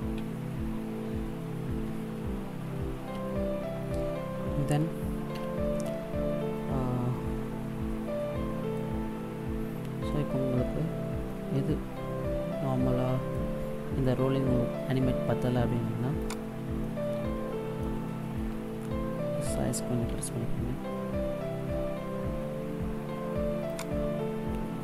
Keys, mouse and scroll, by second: 5.2 KP_0, 6.5 middle click, 10.5-11.2 scroll down 2, 11.2 middle click, 16.1 right click, 16.6 middle click, 18.5 s.